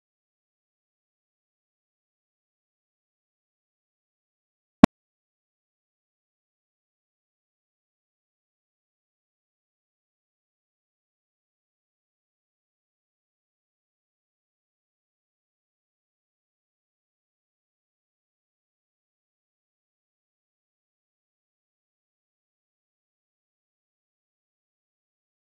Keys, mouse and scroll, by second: 0.0-1.0 typing, 0.2-0.9 scroll up 5, 0.5 middle click, 0.5 Tab, 1.4 KP_Divide, 1.7 scroll up 5, 1.9 shift+middle click, 2.1 scroll down 4, 2.2-3.7 shift+middle drag, 3.7 click, 3.8 Tab, 4.0 scroll up 3, 4.0 scroll down 9, 4.4 Tab, 4.5 click, 4.6 Tab, 4.8 scroll up 4, 4.9 a, 5.0 scroll down 3, 5.1 s, 6.0 ctrl+z, 6.3 a, 6.4 a, 6.6 scroll down 1, 6.8 scroll up 1, 7.0 b, 7.4 scroll up 1, 7.4 s, 8.0-8.3 scroll down 1, 8.4 click, 8.6 3, 8.7 click, 9.5 g, 9.8 click, 10.1 shift+drag, 10.4 g, 10.7 scroll up 7, 10.9 shift+middle click, 11.4 scroll down 2, 11.5 middle click, 11.5 scroll up 5, 12.0 click, 12.1-12.8 scroll down 7, 12.9 click, 13.8 middle click, 13.8 scroll down 11, 14.0-14.4 scroll up 22, 14.1 middle click, 14.4 middle click, 14.9 KP_Divide, 15.1 middle click, 15.4-15.9 scroll up 9, 15.9 scroll down 2, 16.0 drag, 16.3 shift+click, 17.1 middle click, 17.1-21.3 typing, 18.4 scroll up 3, 21.5 scroll down 1, 21.6 ctrl+z, 21.8 scroll up 2, 22.1 middle click, 22.3 click, 22.5 Tab, 22.6 middle drag, 22.9 KP_0, 23.4 KP_Divide, 24.3 scroll up 19, 24.6-25.0 scroll down 30, 25.0 scroll up 3, 25.2 KP_0, 25.4 scroll down 7.